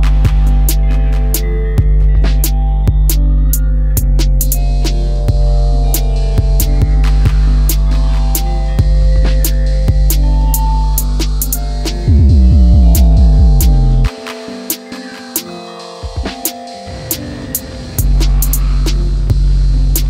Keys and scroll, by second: 1.7 ctrl+z, 2.3 space, 4.9 shift+x, 14.5 space, 14.6 Escape, 18.8 m.